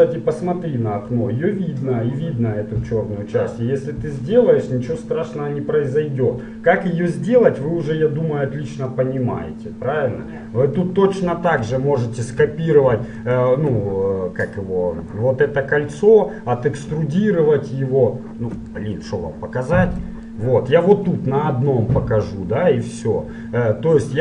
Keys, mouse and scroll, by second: 12.1-15.3 right drag, 18.8-22.2 middle drag.